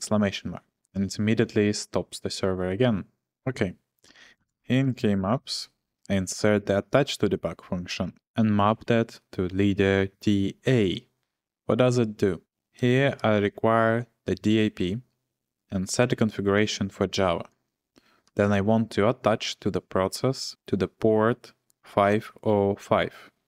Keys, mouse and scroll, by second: 3.5 z, 4.0 o, 4.4 Return, 5.2 shift+v, 10.9-13.1 typing, 17.1 j, 17.5 j, 18.2 j.